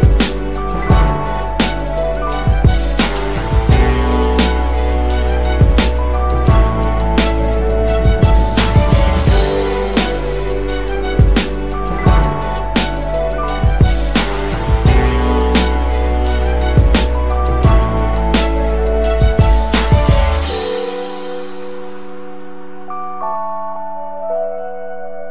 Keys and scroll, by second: 1.3-4.1 typing.